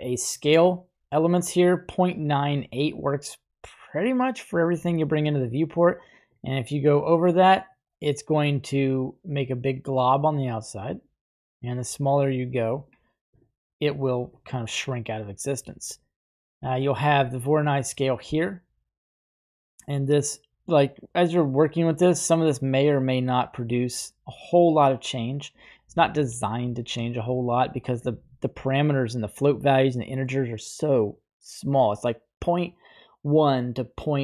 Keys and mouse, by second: 6.1-13.1 drag, 17.8-25.8 shift+drag.